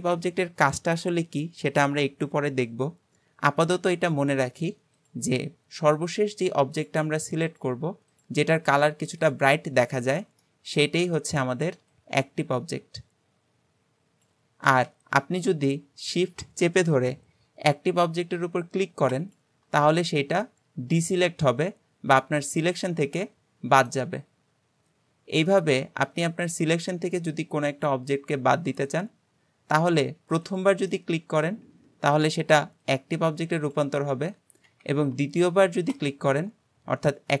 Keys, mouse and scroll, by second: 5.0 shift+click, 5.8 shift+click, 6.8 shift+click, 7.5 shift+click, 8.1 shift+click, 9.3 shift+click, 10.4-14.9 shift+middle drag, 19.2 shift+click, 25.5-28.5 middle drag, 30.5 shift+click, 30.9-34.9 shift+middle drag, 36.0 shift+click, 36.8-37.4 scroll up 1.